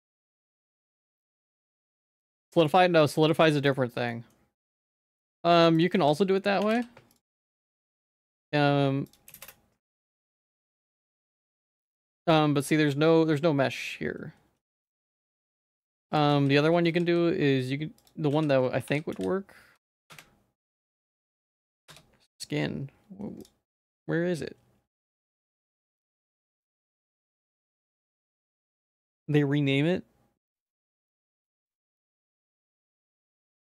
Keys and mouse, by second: 0.3 ctrl+s, 0.6 shift+middle click, 1.0 middle click, 1.3 Tab, 1.5 middle click, 2.1 ctrl+s, 2.2 middle click, 3.0 shift+middle click, 3.6 middle click, 4.1 middle click, 5.7-7.2 drag, 9.2 click, 10.0 click, 11.0-14.7 drag, 15.5 click, 15.9-23.5 drag, 20.1 BackSpace, 24.0-33.6 drag.